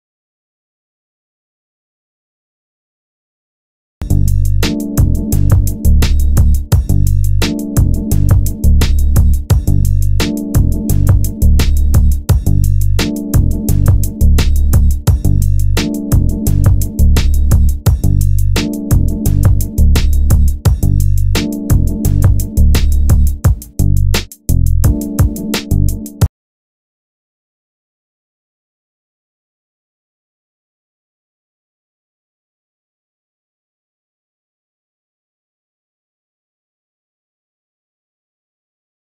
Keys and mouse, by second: 1.9-2.9 drag, 2.4 a, 2.9 b, 4.1 g, 10.3 g, 16.8-18.0 drag, 18.0 g, 21.3 g, 24.9 g, 27.7-29.6 drag, 28.2 g, 30.8 click, 31.5 g, 32.0-33.0 middle drag, 34.6 g, 35.2 middle click, 36.3-38.7 drag, 38.7 g.